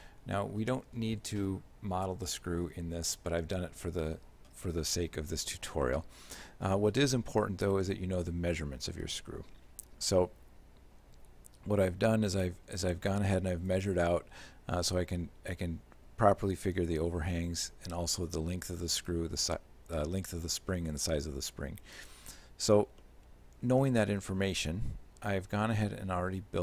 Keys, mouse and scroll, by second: 0.6 scroll up 1, 1.7-2.7 scroll up 3, 5.9 shift+middle click, 7.1 middle click, 7.8 shift+middle click, 12.7 scroll up 1, 12.9 middle click, 13.7 right click, 18.3 right click, 23.1 shift+middle click.